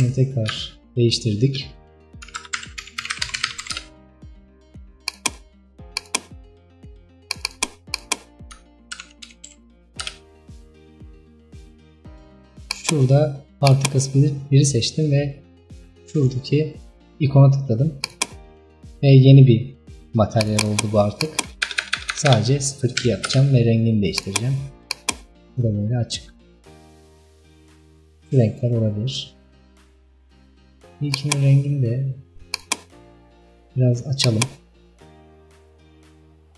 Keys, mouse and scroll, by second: 5.2 click, 6.1 click, 7.6-15.9 drag, 18.1-20.6 drag, 23.3 BackSpace, 25.0 click, 31.2 click, 34.3 click.